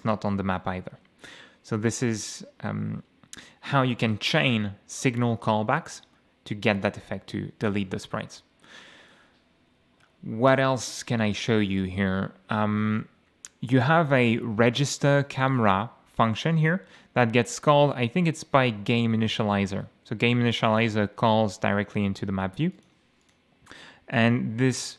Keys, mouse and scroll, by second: 0.9 F8, 5.9 click, 6.7 click, 12.3-12.6 scroll up 1, 12.8-13.2 scroll up 1, 14.4 click, 15.5 click, 16.2 click, 22.7 click, 23.2 click.